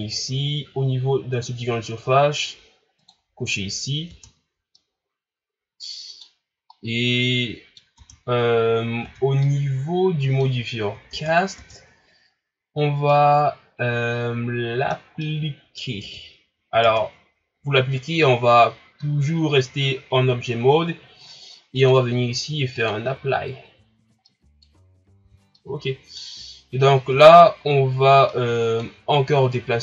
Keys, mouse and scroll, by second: 3.0 click, 4.1 Tab, 4.8-6.5 middle drag, 6.5 scroll down 1, 6.7-8.0 middle drag, 8.0 Tab, 9.0 Tab, 9.4-11.1 middle drag, 11.1 Tab, 11.6 Tab, 13.1-16.0 middle drag, 16.0 Tab, 16.8 Tab, 19.2 scroll down 2, 21.8-24.3 drag, 24.3-24.9 middle drag, 24.9-25.2 scroll up 1, 25.2 Tab, 25.6 middle click, 26.3-27.2 scroll up 1, 27.2-28.3 shift+scroll up 2, 28.3-29.8 middle drag.